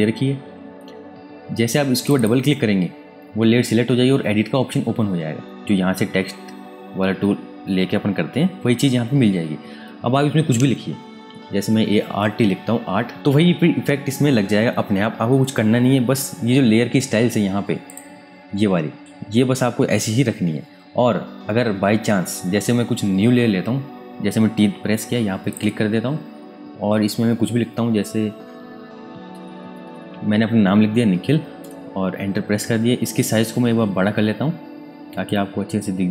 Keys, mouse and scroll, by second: 2.0 click, 10.7-12.0 typing, 13.1 Return, 17.8 click, 21.8-22.4 scroll down 1, 22.4-24.1 scroll up 1, 24.1 t, 25.5 click, 29.1-30.4 typing, 31.6 Return, 32.7 v, 34.2 ctrl+t, 35.2 click.